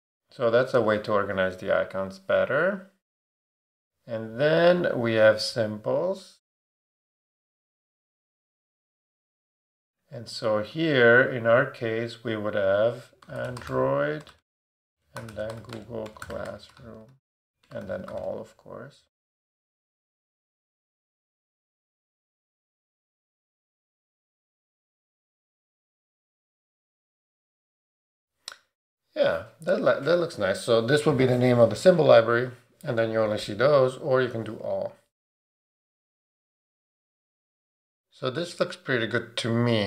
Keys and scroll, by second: 13.0-18.6 typing, 20.2 super+a.